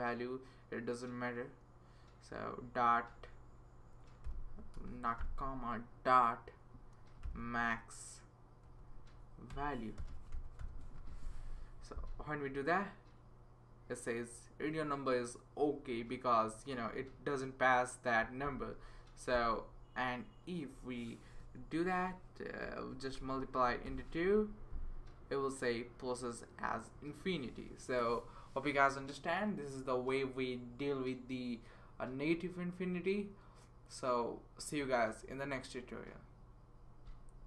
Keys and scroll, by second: 4.3 ,, 4.7 BackSpace, 5.2 ., 6.7-11.3 typing, 22.6 *, 23.9 2.